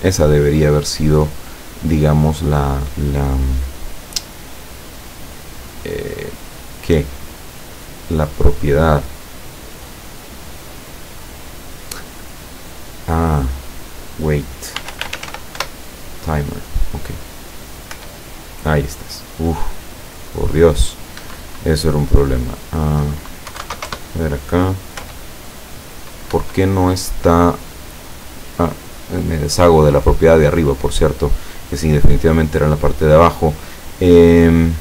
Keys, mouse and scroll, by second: 13.7 click, 14.8-15.3 typing, 15.6 Return, 17.9 p, 21.3 Escape, 22.6 click, 23.5 KP_1, 23.6 KP_2, 23.7 KP_0, 23.9 KP_Enter, 25.0 p, 26.4 Escape, 29.0 click.